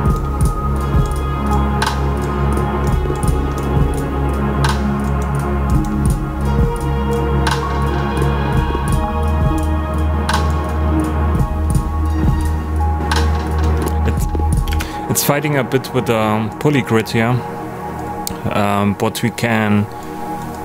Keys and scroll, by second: 14.6 space.